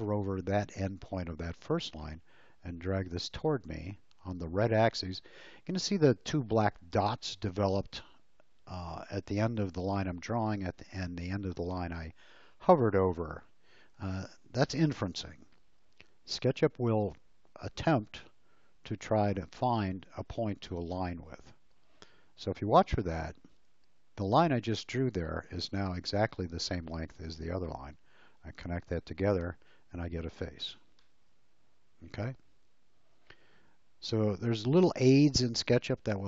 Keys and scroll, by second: 30.6 space.